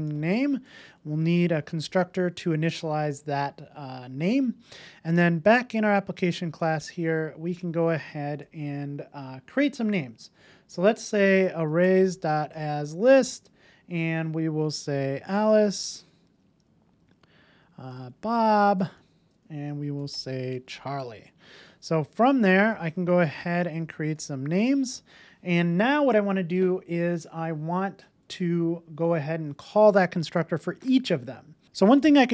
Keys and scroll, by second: 0.9 alt+Return, 2.2 super+s, 7.5 Tab, 12.9 Return, 22.9 Return.